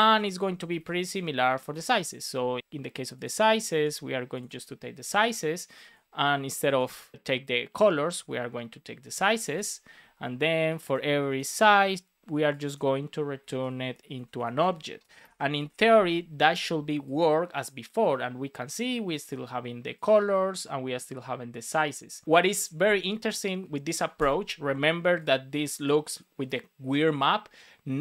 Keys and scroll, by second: 0.2 shift+Up, 0.7 super+c, 0.8 Down, 1.4 super+Right, 1.6 Return, 1.7 super+v, 3.6 super+c, 4.9 super+v, 14.4 super+s, 15.1 alt+shift+f, 15.5 super+s.